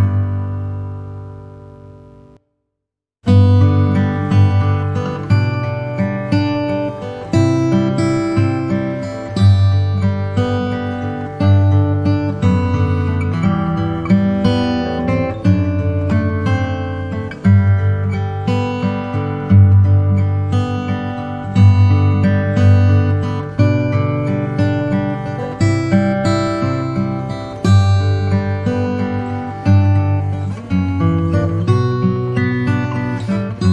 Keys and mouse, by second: 1.6 click, 6.0 e, 12.3 ctrl+r, 14.7 s, 21.9 click, 23.4 s, 28.4 e.